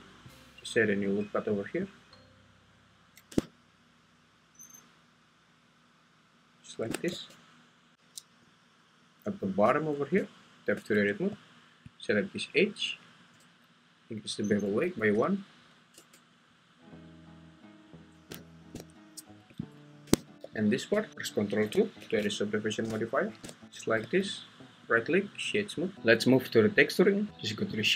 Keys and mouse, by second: 6.8 shift+click, 7.1 Tab, 10.1 Tab, 12.9 alt+click, 14.6 click, 15.9 Tab, 19.7 `, 20.3 Escape, 20.3 g, 20.5 g, 20.9 Escape, 22.1 ctrl+2, 23.6 n, 25.1 right click.